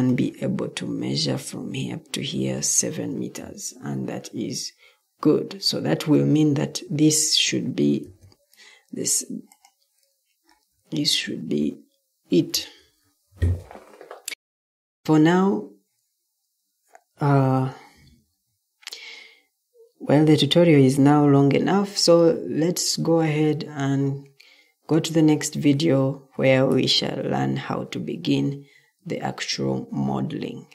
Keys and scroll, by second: 3.3 Escape, 8.0 m, 12.4 Escape.